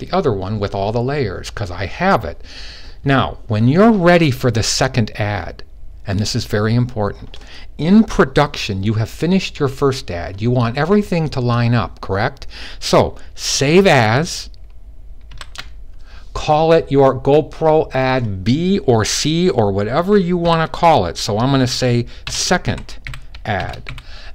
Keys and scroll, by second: 15.0 shift+super+s, 20.2 typing, 21.8-23.6 typing.